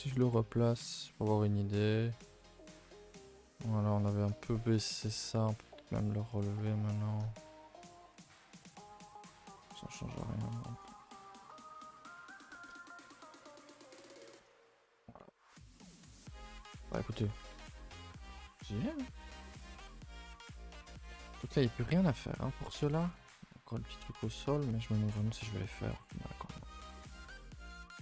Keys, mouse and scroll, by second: 0.1 click, 0.6 g, 3.7 scroll up 2, 4.2 scroll, 4.6 click, 4.9 shift+click, 5.2 g, 6.5 r, 7.0 g, 7.8 a, 8.0 a, 8.6 middle click, 8.9-9.5 scroll up 8, 9.2 middle click, 9.7-10.5 middle drag, 10.9-13.2 middle drag, 13.2 a, 13.3 a, 13.4-14.6 middle drag, 14.6 KP_0, 15.2 scroll down 1, 15.7-16.3 scroll down 3, 15.9 a, 16.0 a, 16.3 s, 17.1-19.2 shift+middle drag, 19.2-19.6 scroll up 2, 19.6-22.0 shift+middle drag, 22.0 a, 22.1 a, 22.4 click, 22.9 g, 27.2 g.